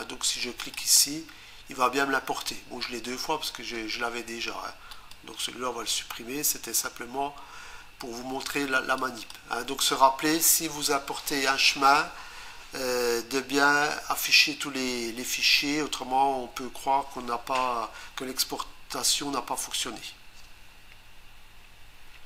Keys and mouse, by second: 0.6 click, 0.8 click, 0.9 double click, 4.9 right click, 9.0 click.